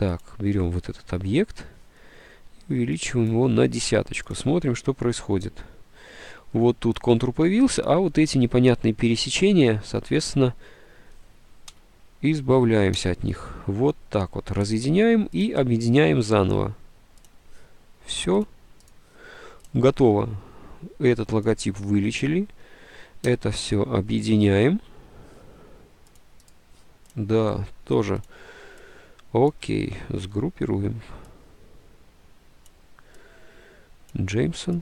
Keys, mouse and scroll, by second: 1.9 click, 3.5 1, 11.8 k, 13.1 d, 23.5 d, 30.3 ctrl+g.